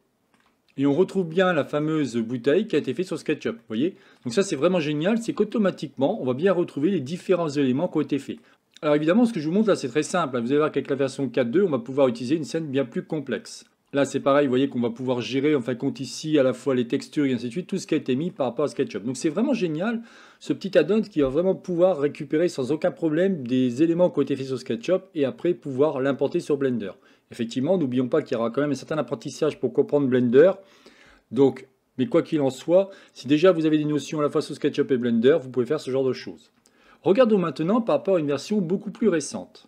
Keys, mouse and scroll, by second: 0.2 shift+middle click, 0.8-1.4 scroll up 6, 1.4 shift+middle click, 2.2-2.8 scroll up 5, 2.8 click, 3.2-3.6 scroll down 4, 3.6 shift+middle click, 4.5-5.0 scroll down 3, 5.0 scroll up 4, 6.1-10.1 middle drag, 13.7 click, 14.3-15.4 middle drag, 15.4 scroll up 8, 16.0-18.7 middle drag, 18.7-19.6 scroll down 7, 19.6-22.7 shift+middle drag.